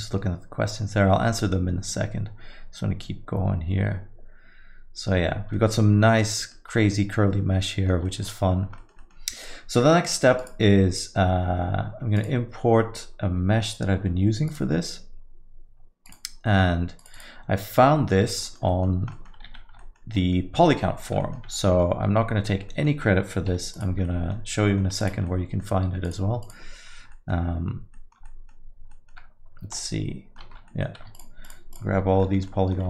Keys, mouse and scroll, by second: 1.2 scroll up 2, 1.4 alt+middle click, 5.3 scroll up 3, 5.5 alt+middle click, 6.4 middle click, 6.7 scroll up 1, 6.9 alt+middle click, 8.1 middle click, 8.2-8.6 scroll down 10, 8.8 alt+middle click, 9.0 middle click, 10.4 click, 18.1 middle click, 18.4 alt+middle click, 18.7 middle click, 18.9 scroll down 1, 19.1 alt+middle click, 19.5 z, 20.2 middle click, 21.0 alt+middle click, 21.2 middle click, 22.1 Tab, 22.5 alt+middle click, 22.7 alt+middle click, 24.0 3, 24.0 click, 24.2 alt+middle click, 24.6 alt+middle click, 25.0 click, 25.2 alt+middle click, 26.0 shift+click, 26.4 click, 27.1 alt+middle click, 27.9 middle click, 28.2 alt+middle click, 28.9 middle click, 29.8 Tab, 29.9 alt+middle click, 30.4 Tab, 30.6 alt+middle click, 31.1 shift+click, 31.4 shift+click, 32.0 shift+click, 32.2 middle click, 32.4 alt+middle click.